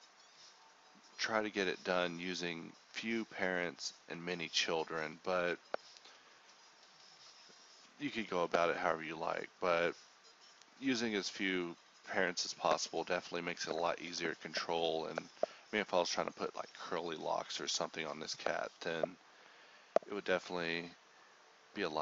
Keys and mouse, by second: 2.5-4.7 drag, 4.9-8.6 drag, 9.2 KP_1, 10.8-12.2 drag, 12.2 a, 13.5 ctrl+Tab, 13.8 click, 14.5-15.1 middle drag, 16.1 f, 16.6 click, 16.8-18.1 middle drag, 16.9 f, 18.1-18.8 drag, 18.8 right click, 18.9-19.6 middle drag, 20.9 ctrl+z.